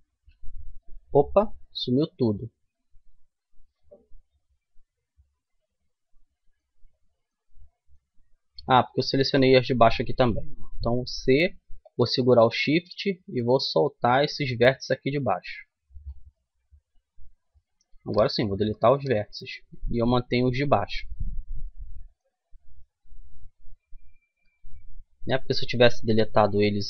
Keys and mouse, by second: 1.2 ctrl+z, 6.6-11.5 middle drag, 10.2 c, 15.7 right click, 16.0 middle click, 17.9 Delete, 20.3 middle click, 20.5 middle click, 22.4-24.7 right drag, 23.3 Delete, 24.9-26.5 middle drag.